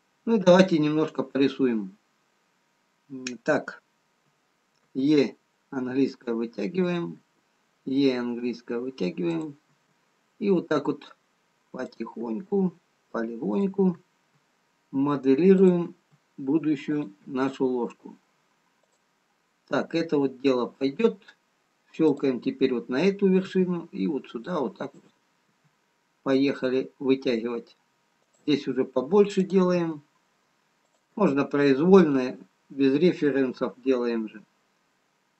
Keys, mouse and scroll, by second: 5.3 e, 7.6 e, 12.6 e, 14.4 e, 16.3 e, 17.7 e, 22.6 click, 23.9 e, 25.9 e, 29.0 e, 30.2 e, 33.4 e.